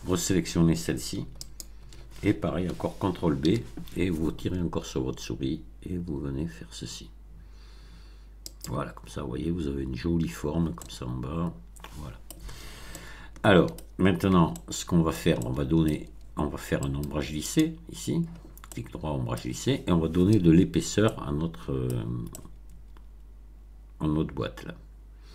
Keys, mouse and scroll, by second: 1.4 alt+click, 3.4 ctrl+b, 8.4 click, 10.7-12.4 middle drag, 12.8-13.9 shift+middle drag, 14.3 Tab, 14.5-15.3 middle drag, 15.4-16.0 shift+middle drag, 16.8 right click, 17.5 click, 18.6-19.5 middle drag, 21.0-21.9 middle drag, 21.9 scroll down 1, 22.2-25.3 middle drag.